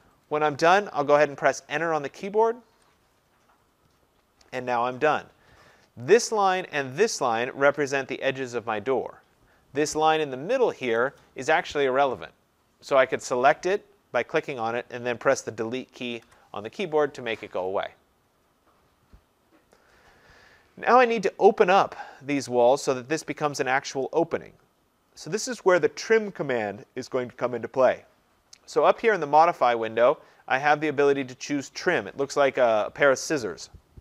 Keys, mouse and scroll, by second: 2.7 Return, 6.2 click, 7.9 click, 10.5 Escape, 11.0 click, 16.2 Delete.